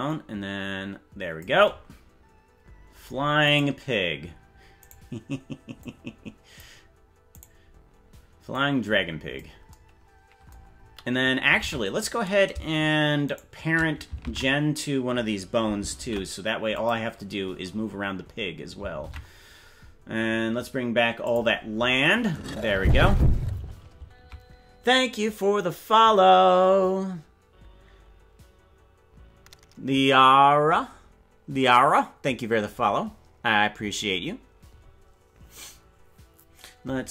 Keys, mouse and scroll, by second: 3.6 right click, 5.0 right click, 5.7 click, 7.5 right click, 8.5 click, 11.6 ctrl+Tab, 13.4 shift+right click, 14.2 ctrl+Tab, 16.0 ctrl+p, 19.2 ctrl+Tab, 19.6-20.0 scroll down 6, 21.7 click.